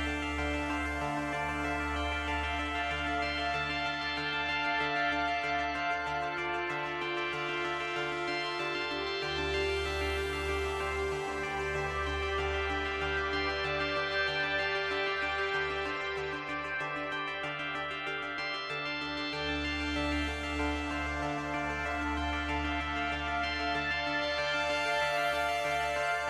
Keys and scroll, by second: 0.6 space, 2.0 space, 3.7 Delete, 4.6 space, 5.5 space.